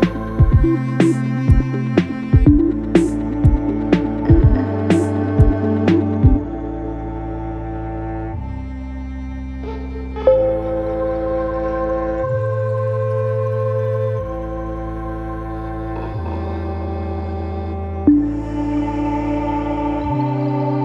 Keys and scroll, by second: 0.0 3, 1.1 ,, 2.2 ctrl+d, 2.3 Escape, 9.4 ], 14.5 4.